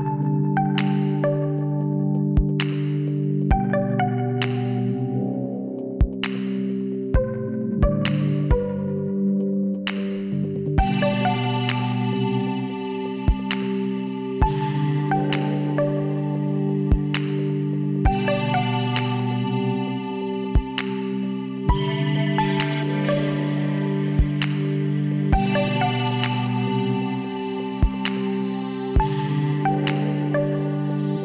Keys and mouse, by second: 0.7-4.0 drag, 3.7-6.6 middle drag, 6.6-9.8 drag, 9.8-12.6 middle drag, 14.3 w, 19.8-21.6 middle drag, 21.6-24.4 drag, 23.6 g, 24.4 middle click, 24.7 click, 25.7 click, 25.8 g, 27.0 middle click, 28.3 click, 28.5 g, 30.3 g.